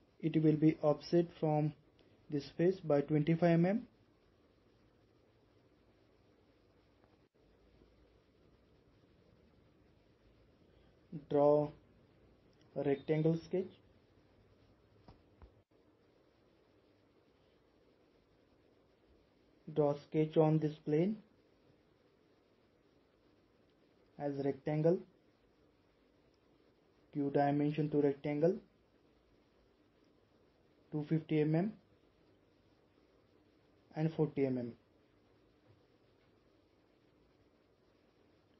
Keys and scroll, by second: 4.5 typing, 5.4 Return, 29.7-30.7 typing, 34.2-34.9 typing.